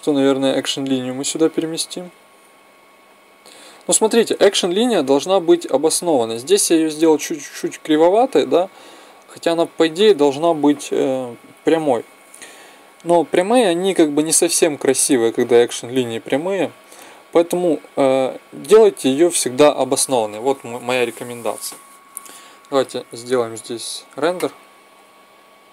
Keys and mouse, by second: 2.4 m, 4.6-6.6 drag.